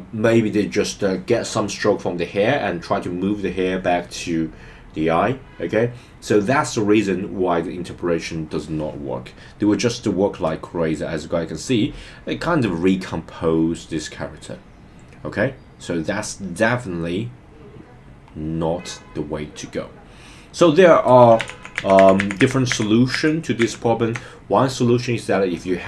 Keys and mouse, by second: 10.4-21.0 drag, 21.7 super+z, 21.9 super+z, 22.1 super+z, 22.3 super+z, 22.5 super+z, 22.7 super+z, 23.1 super+z, 23.6 super+z.